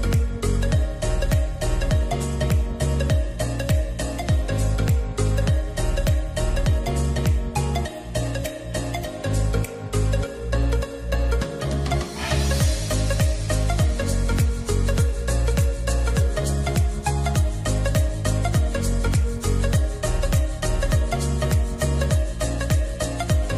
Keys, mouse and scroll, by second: 3.5 middle click, 5.8 double click, 11.8 double click, 14.1 double click, 21.7 middle click.